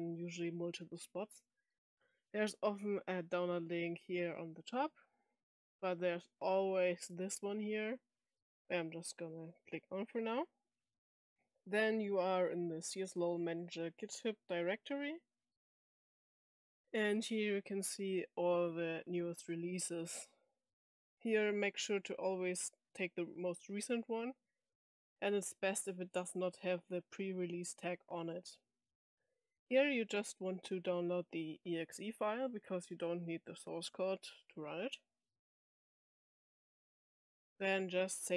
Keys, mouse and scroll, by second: 5.0 scroll down 2, 5.6 scroll down 2, 8.4 middle click, 9.1 click, 16.6 scroll down 2, 20.9-21.5 drag, 22.4 click, 23.8 scroll down 2, 26.2 scroll down 2, 27.6-28.6 scroll up 4, 28.6-29.3 scroll down 1, 34.5 click, 37.8 scroll down 2.